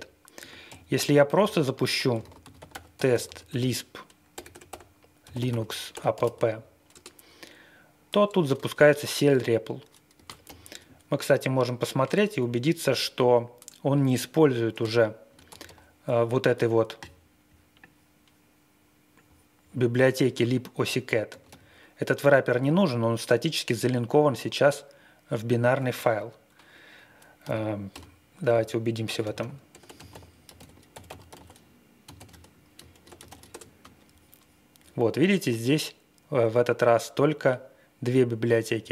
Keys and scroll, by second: 0.7 ctrl+l, 1.3-6.7 typing, 6.9 Return, 10.4 shift+9, 15.6 ctrl+q, 15.6 1, 21.3 ctrl+q, 21.4 l, 27.4-33.7 typing.